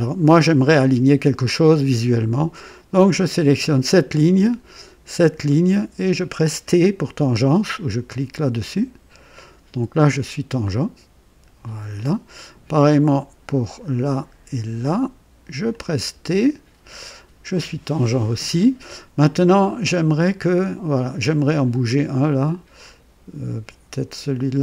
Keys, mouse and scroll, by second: 3.2 click, 5.6 click, 8.6 t, 8.8 t, 10.6-12.2 drag, 13.6 click, 15.7 click, 16.1 typing, 22.8-24.6 drag.